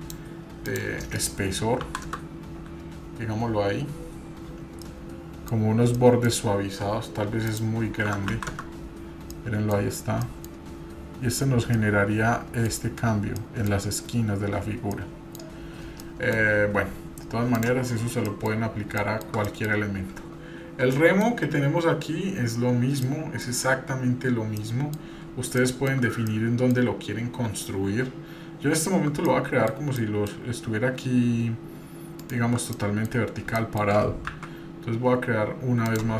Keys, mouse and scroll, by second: 0.7-2.2 drag, 4.7 scroll down 1, 4.8-5.5 middle drag, 5.7 scroll up 1, 5.9 middle click, 7.5-8.7 drag, 9.3-9.8 middle drag, 9.8 scroll up 2, 10.2-10.8 middle drag, 10.8-11.4 scroll up 1, 11.4 scroll up 1, 11.7-12.7 middle drag, 11.7 scroll down 1, 12.8-13.4 scroll down 1, 13.4 middle click, 14.4-14.9 scroll down 1, 14.9-15.3 middle drag, 15.5-16.1 scroll down 3, 16.0 middle click, 16.6-17.5 scroll down 2, 17.5 drag, 18.1 scroll down 1, 18.3 middle click, 18.7 scroll up 1, 19.0-19.4 shift+middle drag, 19.4 middle click, 20.9 middle click, 23.0-23.8 middle drag, 23.8-24.6 scroll down 1, 24.6 middle click, 25.6 shift+middle click, 26.3 middle click, 28.1-28.6 scroll up 1, 29.3 middle click, 30.0 middle click, 32.2-32.5 shift+right drag, 32.7-33.1 middle drag, 33.2 scroll up 2, 33.6-34.0 shift+middle drag, 34.3 shift+a.